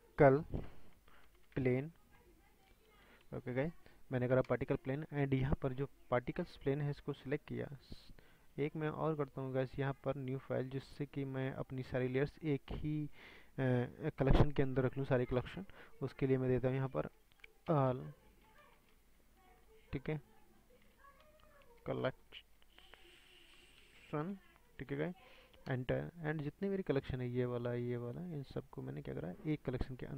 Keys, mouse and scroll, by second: 10.3-11.6 right drag, 11.7-25.7 drag, 28.0 shift+click, 30.0-30.1 drag.